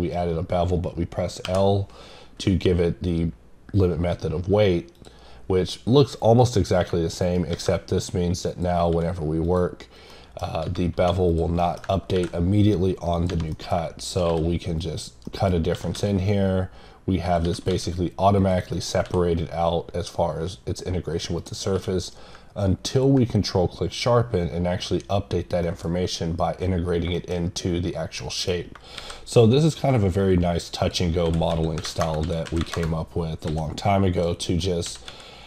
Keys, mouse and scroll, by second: 4.9 click, 7.2 right click, 8.5 click, 9.4 click, 10.1 middle click, 10.5 scroll up 1, 11.3 click, 11.6 middle click, 13.1 click, 13.5 middle click, 14.0 click, 14.8 click, 15.2 middle click, 17.2 click, 18.4 click, 18.7 middle click, 21.4 click, 22.9 click, 25.6 middle click, 27.1 middle click, 29.9-32.0 drag, 34.1 click, 34.4 middle click.